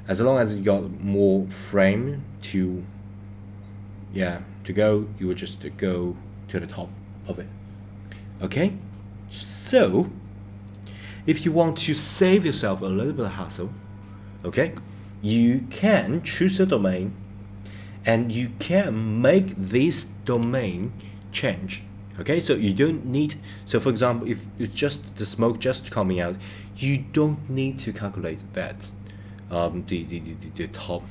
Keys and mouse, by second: 9.9 click, 10.6 click, 15.7 click.